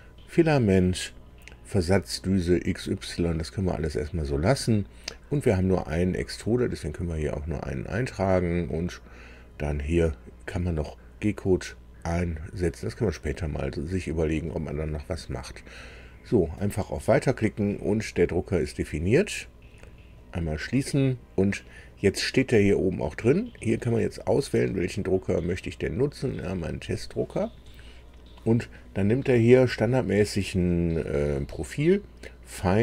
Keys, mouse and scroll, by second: 16.5 click, 20.1 click, 23.7 click, 26.2 click.